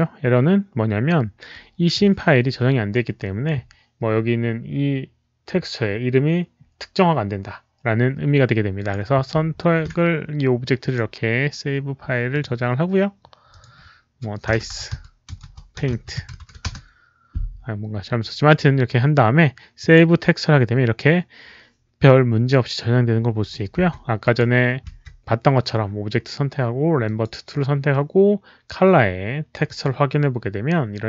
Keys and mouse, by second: 1.5 click, 8.7 click, 10.7 click, 12.2 click, 13.4 click, 14.2-16.6 typing, 14.9 click, 19.7 click, 21.8 click, 23.5-24.7 typing, 24.1 click, 26.6-27.3 typing, 26.9 click, 29.6 click, 29.6 w.